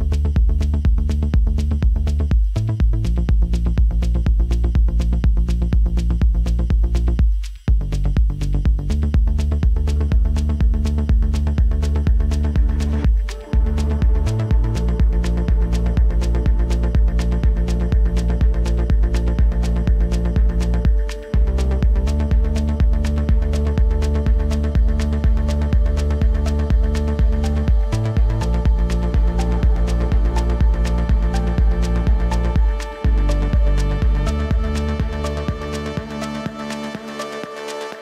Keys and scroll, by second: 9.9 ctrl+d.